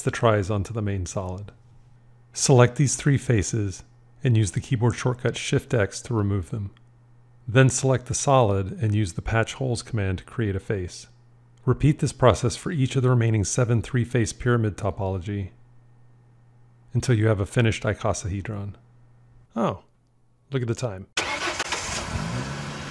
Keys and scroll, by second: 5.9 shift+x.